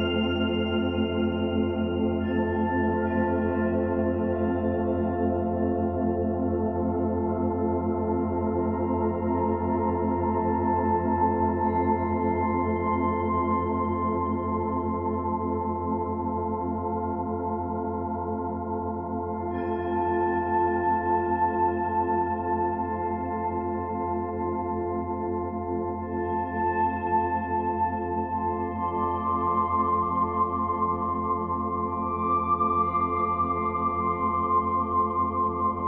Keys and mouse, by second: 0.0-1.9 drag, 4.1 Right, 4.5 Right, 4.7 Right, 4.8 Right, 5.2 Right, 6.5 i, 7.2 click, 11.3 ctrl+z, 12.7 click, 14.9 click, 17.3 s, 18.1 0, 18.4 Return, 19.5-22.3 typing, 19.9 click, 22.0 click, 22.2-24.1 drag, 23.8-24.6 typing, 25.8 ctrl+s, 28.7 click, 30.5-32.1 drag, 34.6 click.